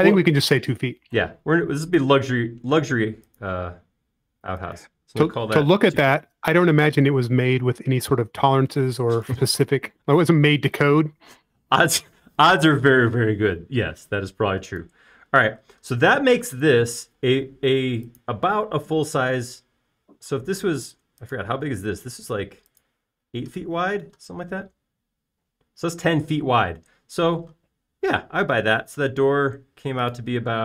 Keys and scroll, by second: 6.8-7.6 typing, 9.1 e, 15.7 space, 18.1 typing, 23.0 l, 27.3 space, 29.7 l.